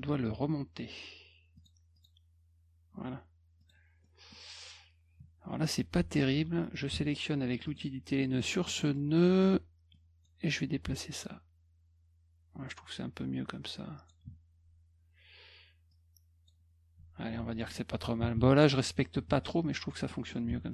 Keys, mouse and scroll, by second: 1.6 click, 1.9 click, 3.6 click, 4.0 middle drag, 5.5 middle click, 6.9 F2, 7.6 click, 8.7-9.4 scroll up 6, 9.9 click, 11.2-14.1 drag, 15.9 click, 17.2 F1, 17.5 click, 19.0 middle click, 20.1 middle click, 20.5 F1.